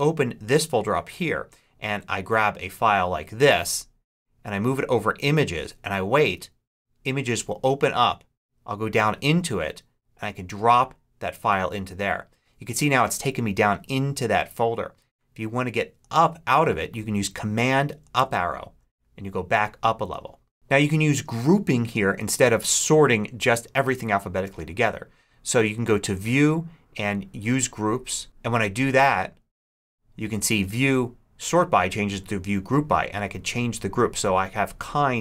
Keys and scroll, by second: 18.0 super+Up.